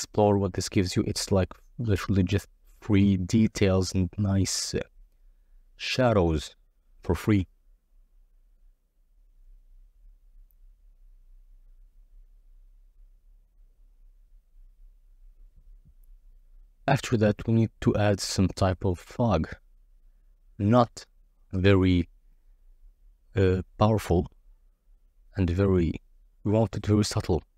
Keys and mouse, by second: 11.0 click, 12.1 click, 12.8 z, 13.8 click, 14.4 shift+a, 16.4 s, 17.3 1, 17.8 0, 17.9 0, 18.4 Return, 19.5 z, 19.8 s, 19.8 z, 20.8 click, 20.9-22.3 typing, 23.1 click, 23.6 s, 23.7 shift+z, 24.8 g, 24.8 shift+z, 25.6 s, 25.7 shift+z, 26.9 click, 27.3 click.